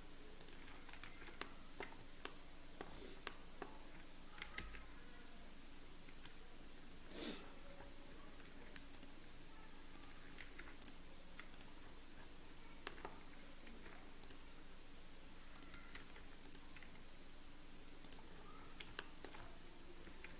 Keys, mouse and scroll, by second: 0.7 scroll down 1, 1.0 shift+z, 1.4 middle click, 1.6-2.0 scroll down 3, 2.0 Tab, 2.2 middle click, 2.8-4.1 scroll up 4, 2.9 Tab, 3.2 middle click, 4.4 g, 7.7-8.1 scroll up 1, 8.4 ctrl+r, 11.8 ctrl+r, 11.8-12.1 scroll down 1, 12.8 middle click, 13.1 scroll down 13, 13.6 ctrl+r, 18.3 ctrl+r, 18.3 scroll down 1, 18.9 shift+middle click, 19.3-19.7 scroll down 7.